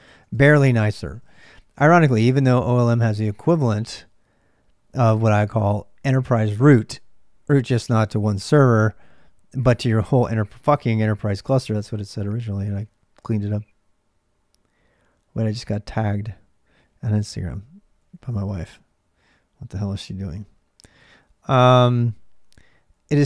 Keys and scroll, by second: 0.0-23.2 typing.